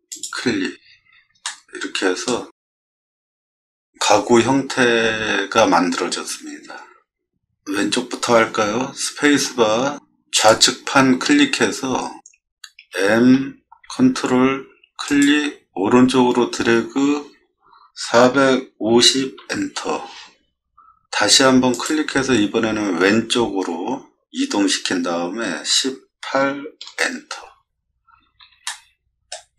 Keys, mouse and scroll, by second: 0.1 click, 1.4-2.2 shift+middle drag, 2.7-3.9 middle drag, 9.4 space, 10.4 click, 11.6-12.2 scroll up 2, 12.8 m, 15.1 click, 18.0 4, 18.9 0, 19.4 Return, 21.7 click, 25.5 1, 26.3 8, 26.9 Return, 28.0 middle click, 28.7 shift+middle click.